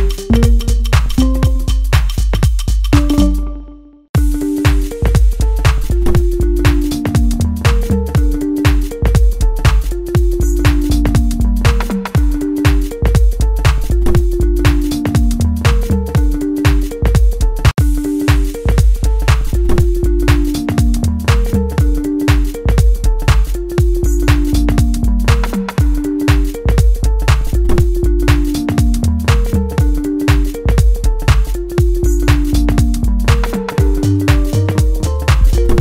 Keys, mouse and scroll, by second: 4.1-14.1 drag, 18.1 click, 18.6-19.2 scroll up 1, 19.2 scroll down 1, 22.4-24.6 right drag, 24.6 click, 28.5-28.9 scroll down 1, 28.9 middle click, 29.8 scroll down 1, 30.3 middle click, 31.5 click.